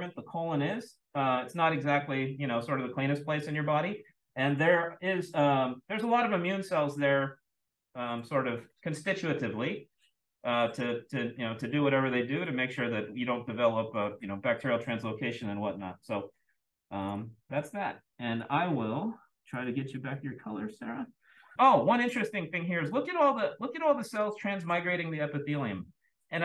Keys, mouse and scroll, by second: 17.0 click, 18.3 click, 19.4 click, 21.5-22.4 scroll up 2, 22.4-22.8 drag.